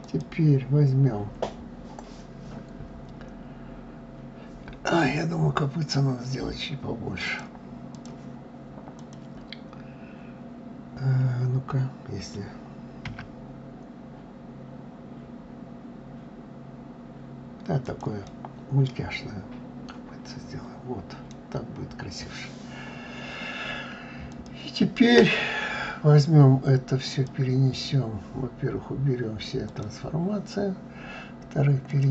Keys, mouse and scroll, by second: 6.8-8.7 drag, 17.8-20.9 middle drag, 20.9-21.4 scroll down 2, 22.0-22.7 scroll up 2, 22.7-23.9 scroll down 2, 23.9 shift+click, 26.6-29.8 drag, 31.5-32.1 drag.